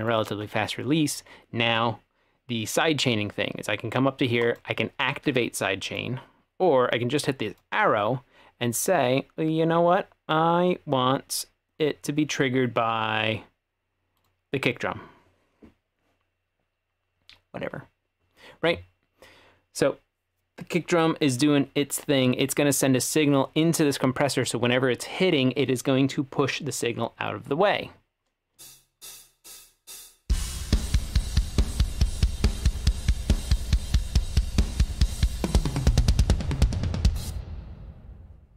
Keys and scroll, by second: 28.6 space, 37.3 space.